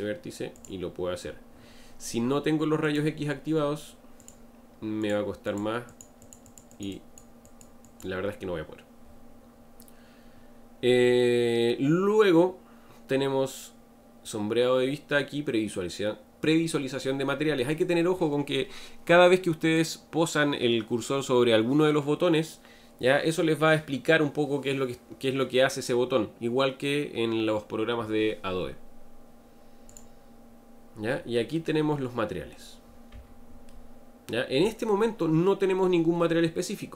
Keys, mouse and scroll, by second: 0.6 click, 2.8-4.3 drag, 5.0 click, 5.5 click, 5.9 click, 6.2 click, 6.4 click, 6.7 click, 6.9 click, 7.4 click, 7.8 click, 30.4 click, 31.6-33.1 middle drag, 33.1 Tab, 33.7-36.8 middle drag.